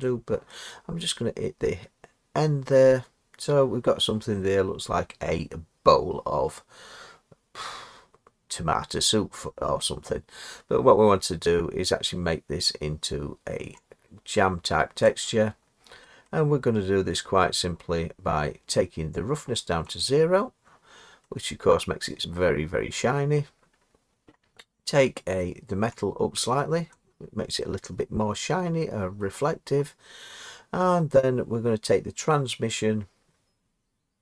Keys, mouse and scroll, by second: 0.0 click, 15.0 click, 17.3 middle click, 19.9 click, 23.1 middle click, 23.8-25.4 scroll up 3, 26.9 click, 29.2 middle click.